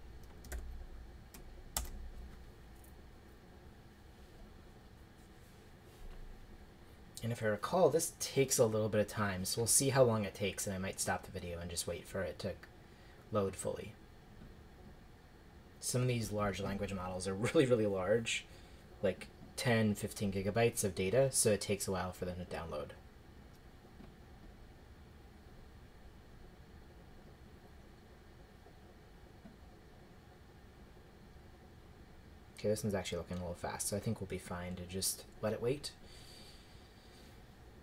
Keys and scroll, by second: 0.0-1.0 typing, 1.8 shift+Return.